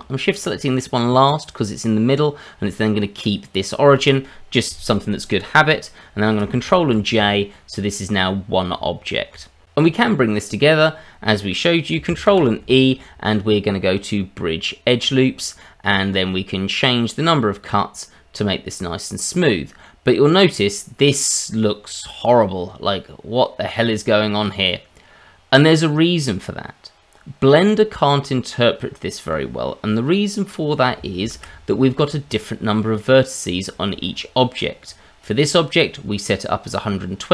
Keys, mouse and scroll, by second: 6.6 ctrl+j, 7.6-8.7 scroll down 1, 8.7 Tab, 12.3 ctrl+e, 15.5 scroll down 1, 15.6 middle click, 17.3 click, 19.4-19.8 scroll up 2, 19.8 middle click, 30.4 middle click, 31.2 ctrl+z, 31.9 middle click, 33.6 shift+middle click, 34.0-34.9 scroll up 2, 34.9-35.2 scroll down 1, 35.2 click, 37.2 scroll down 1.